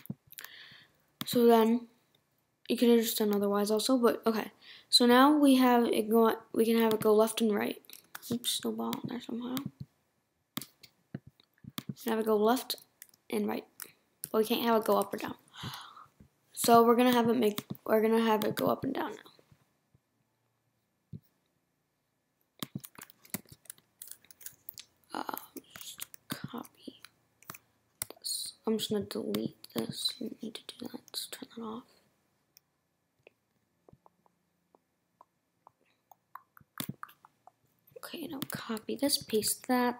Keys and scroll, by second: 8.0 Right, 12.4 Right, 13.1 Left, 14.9 Right.